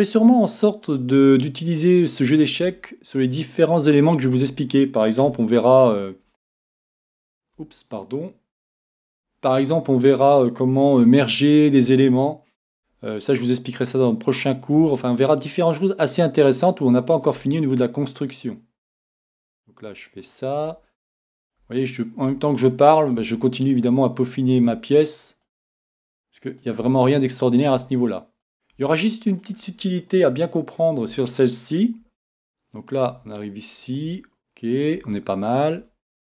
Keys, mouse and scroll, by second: 1.1 e, 2.5-4.3 drag, 2.6 e, 4.2 e, 8.6 e, 10.3-12.0 drag, 11.2-12.8 middle drag, 12.7 e, 14.7-16.5 drag, 14.7 e, 17.1-18.9 drag, 17.3 e, 19.7-21.4 drag, 20.7 e, 21.6-31.2 drag, 21.6 e, 23.2 e, 24.5 e, 25.7 e, 26.8 e, 27.7 e, 28.8 e, 30.3 e, 30.4-32.2 middle drag, 32.0 e, 33.1-36.2 drag, 33.1 e, 34.0 e, 35.1 e, 35.8 e.